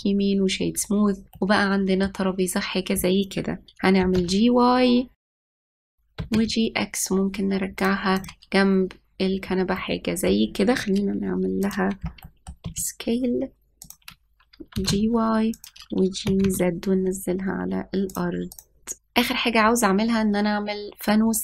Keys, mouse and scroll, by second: 1.6-2.0 scroll down 3, 2.0-4.7 middle drag, 4.7 g, 5.4 shift+middle click, 6.8 g, 8.8 click, 10.4-12.3 middle drag, 12.3 click, 12.9-13.3 middle drag, 13.3 s, 15.4 g, 16.9 g, 19.1 middle click, 19.2 scroll up 2.